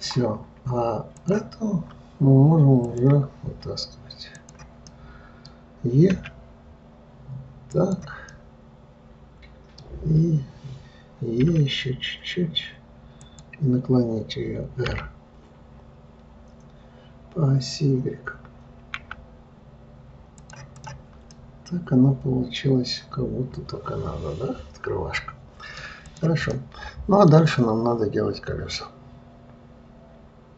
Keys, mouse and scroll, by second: 1.5 click, 3.2-4.8 drag, 5.2-6.5 middle drag, 6.5 e, 8.7-11.7 middle drag, 21.1 click, 21.7-24.7 middle drag, 26.4 click, 26.9-30.0 middle drag.